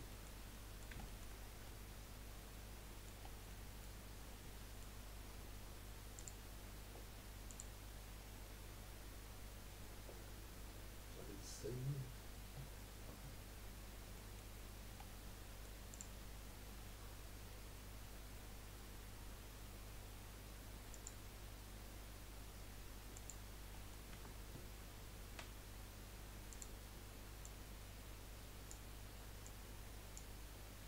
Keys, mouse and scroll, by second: 0.1-1.4 middle drag, 1.4-1.8 scroll up 2, 1.8-3.2 middle drag, 3.2 scroll down 1, 3.5-6.2 middle drag, 6.2-9.3 drag, 12.4-13.2 scroll up 1, 13.2-13.6 scroll up 1, 13.6-14.2 scroll down 3, 14.2 middle click, 14.6-14.9 scroll up 1, 14.9-15.9 middle drag, 15.9 click, 20.9-23.7 drag, 23.7 middle click, 24.1 Tab, 25.5 s, 27.4 click, 29.4 click.